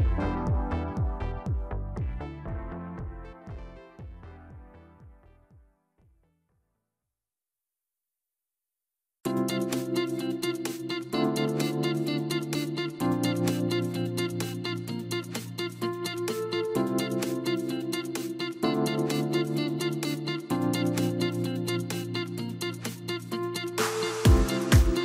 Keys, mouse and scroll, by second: 1.7-3.9 scroll up 1, 3.9 ctrl+a, 7.5 click, 8.8 KP_Divide, 9.6 KP_3, 10.3-11.4 scroll down 2, 11.9 g, 13.1-16.1 middle drag, 16.5 KP_7, 17.6-18.2 scroll up 1.